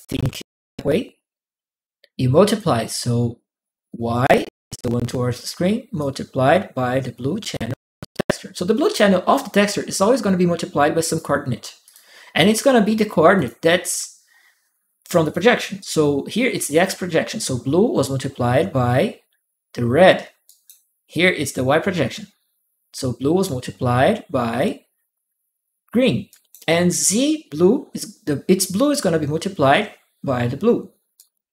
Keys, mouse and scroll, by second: 2.3-4.1 drag, 5.7-7.3 drag, 10.8 click, 11.6 click, 13.1 click, 15.0 click, 20.2 right click, 26.1 right click, 30.9 right click.